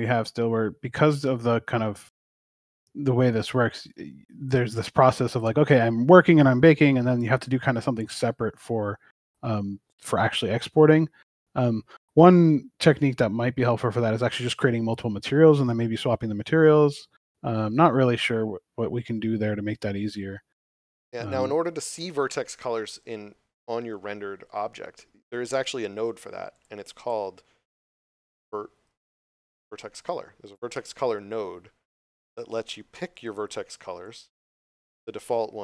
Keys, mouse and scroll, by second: 3.7 click, 5.7 scroll up 1, 7.2 shift+middle click, 13.0 scroll up 1, 14.9 middle click, 17.8 scroll up 1, 20.5 middle click, 21.3 scroll up 1, 26.5 click, 28.6 v, 30.4 click.